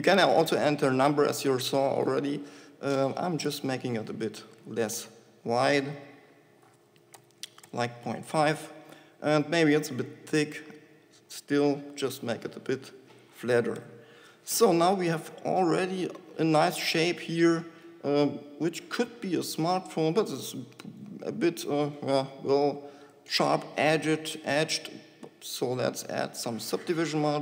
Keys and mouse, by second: 3.6 shift+s, 9.8-12.8 drag, 11.8 s, 17.2 Tab.